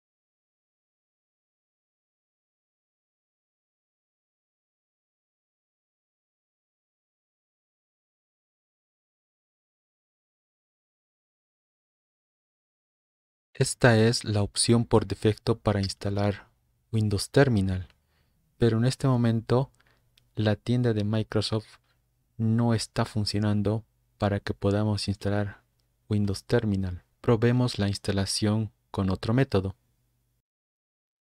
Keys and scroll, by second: 2.0-4.6 typing, 5.7-7.6 typing.